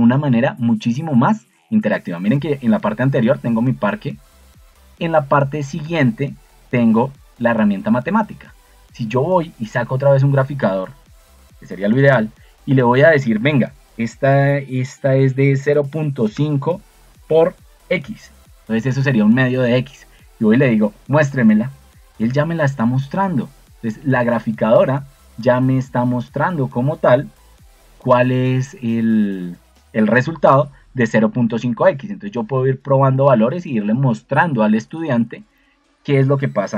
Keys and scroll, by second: 15.3-17.9 typing.